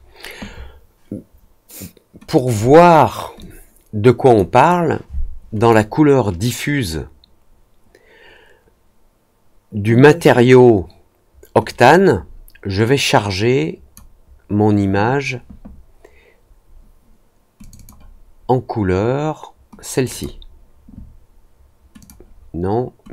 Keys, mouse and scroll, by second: 2.2 click, 2.4 click, 3.3-4.3 drag, 5.5 click, 11.6 click, 12.8-13.9 drag, 17.5 click, 17.7 click, 19.9 click, 20.1 click, 21.9 click, 23.0 click.